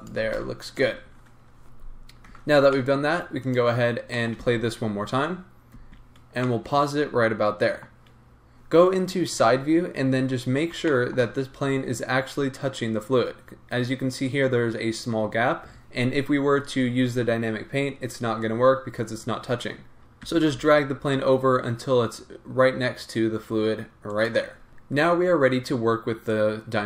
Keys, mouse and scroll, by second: 0.2 g, 2.3 Tab, 2.5 scroll down 1, 2.7 middle click, 3.5 click, 3.8-4.1 scroll up 1, 4.1 middle click, 4.4 space, 6.4 middle click, 7.7-26.8 middle drag, 9.3 KP_3, 10.2-10.8 scroll up 2, 11.6-14.3 scroll up 2, 14.3-19.3 scroll up 1, 19.3-20.2 scroll up 1, 20.2 g, 24.6 scroll down 2.